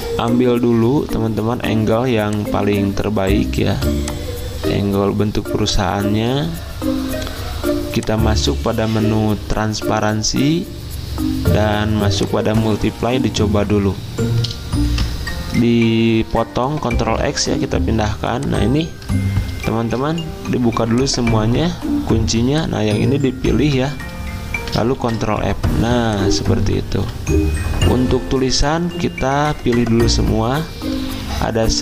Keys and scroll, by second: 16.8 ctrl+x, 17.9 v, 19.6 ctrl+alt+2, 23.6 ctrl+z, 25.0 ctrl+f, 26.9 ctrl+z.